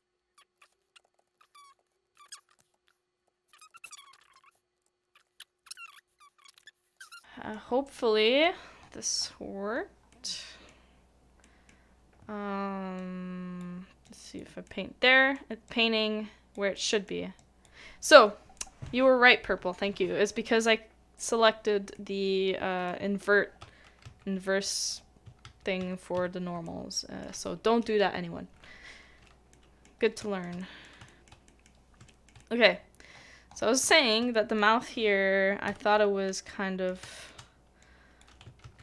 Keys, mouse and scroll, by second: 0.6 shift+middle click, 1.0 ctrl+z, 1.3 ctrl+z, 1.8 ctrl+z, 4.5-5.2 typing, 5.2 shift+middle click, 6.6 middle click, 7.1 shift+middle click, 7.2 middle click, 7.9 scroll up 1, 8.0 scroll down 1, 8.0 scroll up 1, 8.4-8.7 scroll down 1, 8.7-9.2 scroll up 1, 9.2 scroll down 1, 10.1 middle click, 21.9 middle click, 24.0 ctrl+z, 25.4 ctrl+z, 26.6 middle click, 29.5 middle click, 30.2 shift+middle click, 30.6 shift+middle click, 31.1 shift+middle click, 31.5 shift+middle click, 32.1 shift+middle click, 32.4 shift+middle click, 32.7-33.4 scroll down 1, 33.8 scroll up 1, 34.3 shift+middle click, 35.6 middle click, 35.9 scroll, 35.9-36.5 scroll up 1, 36.5 middle click, 37.1 shift+middle click, 38.6 ctrl+z.